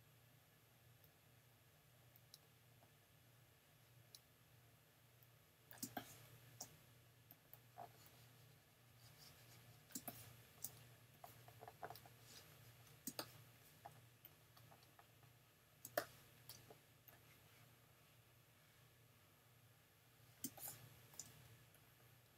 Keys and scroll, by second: 5.8 space, 10.0 space, 13.1 space, 15.8 space, 20.4 space.